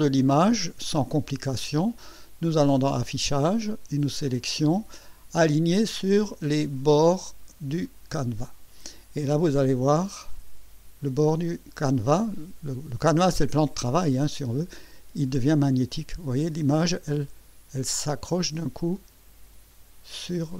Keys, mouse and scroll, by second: 2.6 click, 7.8 click, 9.9-19.7 drag, 20.2 click.